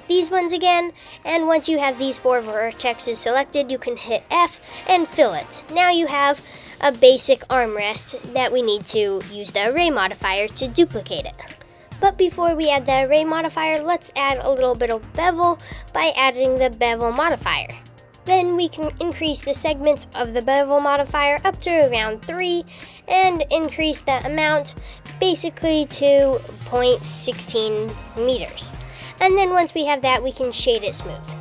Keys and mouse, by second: 2.9 f, 3.5 Tab, 4.7 shift+z, 14.4 click, 17.5 click, 19.8 click, 22.3-25.4 drag, 29.4 g.